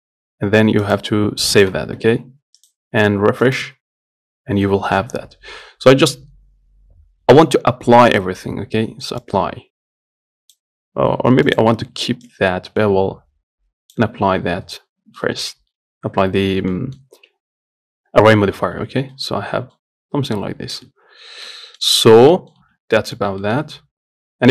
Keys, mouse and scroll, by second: 9.5-14.5 drag, 15.5-17.4 middle drag, 17.4-17.7 scroll up 1, 17.7-18.5 scroll down 1, 18.5-19.1 scroll down 1, 19.1 Tab, 19.4-21.1 middle drag, 21.1 a, 21.7-22.8 middle drag, 22.8 Tab, 23.2-24.5 middle drag.